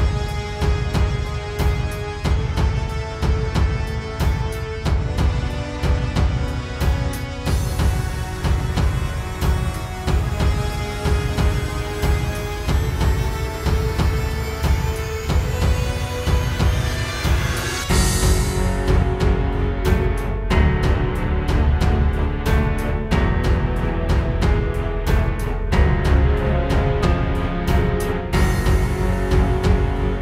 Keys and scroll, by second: 5.3 super+z, 6.2 super+z, 14.4 space, 21.6 space, 22.2 super+space, 23.2 super+space, 27.5 space, 28.4 space, 29.5 space.